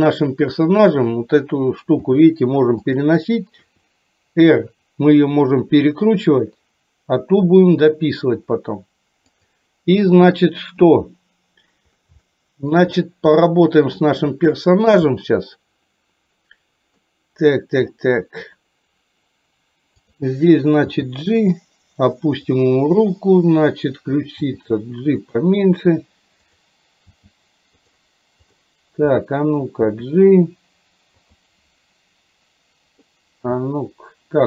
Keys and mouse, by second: 2.0 g, 3.8 r, 10.9 KP_7, 12.2 shift+middle click, 13.5 middle click, 14.8 shift+middle click, 17.1 middle click, 20.1 click, 21.0 g, 23.1 click, 26.6 click, 27.2 g, 28.5 click, 29.3 middle click, 33.7 g.